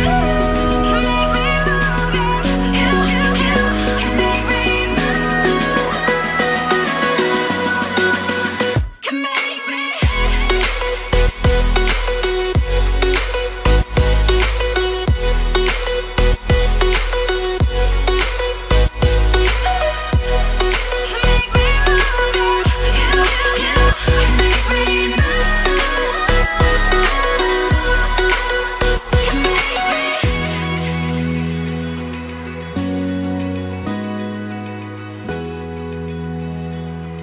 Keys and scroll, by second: 15.6 ctrl+e.